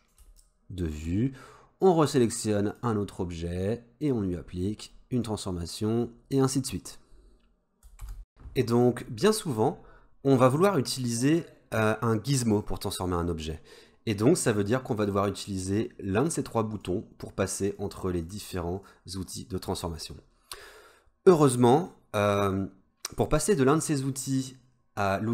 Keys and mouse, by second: 0.4 shift+middle click, 2.7 click, 4.0 click, 5.3 click, 15.1-16.4 drag, 16.8 click, 17.8 click, 18.3 click, 18.9 click.